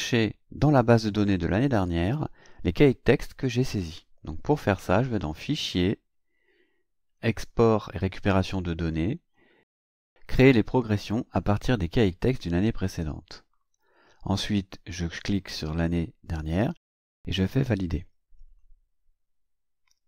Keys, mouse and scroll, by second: 5.3 click, 12.8 click, 15.0 click, 18.5 click.